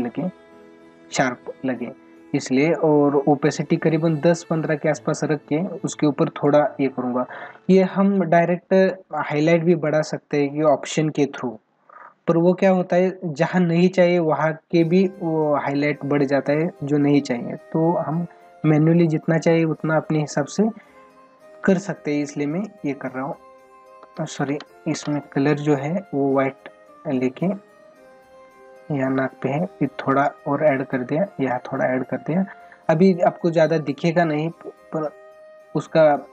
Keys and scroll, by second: 21.5 ctrl+alt+z, 33.8 ctrl+alt+z.